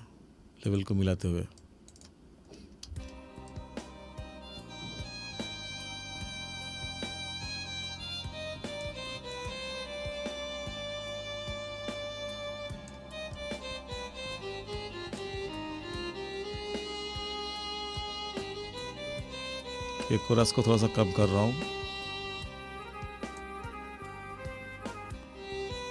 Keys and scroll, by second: 3.0 space.